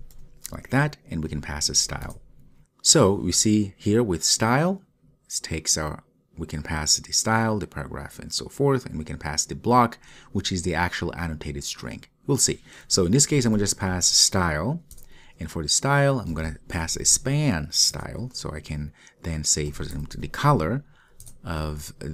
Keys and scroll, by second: 2.1 Return, 15.0 Return.